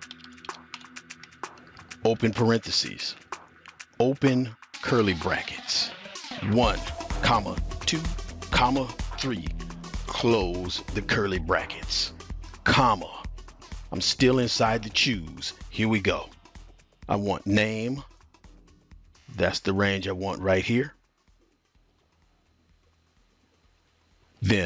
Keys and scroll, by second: 0.0-2.1 typing, 5.5-10.1 typing, 12.6 typing, 20.6-23.6 typing.